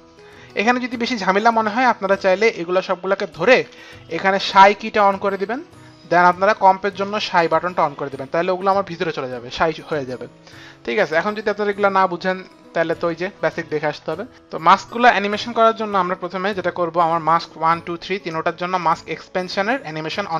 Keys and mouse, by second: 0.5 click, 2.5 click, 3.4 shift+click, 7.2 shift+click, 12.5 click, 14.3 ctrl+z, 14.5 F9, 19.2 click, 19.9 click.